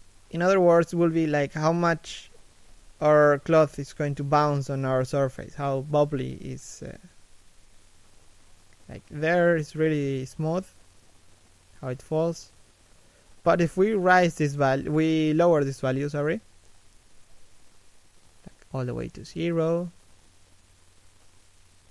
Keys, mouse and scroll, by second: 1.3-1.7 scroll up 1, 1.7 shift+middle click, 2.1 scroll down 1, 2.4 shift+middle click, 2.6 middle click, 3.1 right click, 8.3 middle click, 8.6-9.5 scroll up 2, 8.9 shift+middle click, 9.5 middle click, 10.0-10.6 scroll down 1, 15.0 middle click, 16.1 a, 16.3 shift+middle click, 16.6 middle click, 17.1 right click.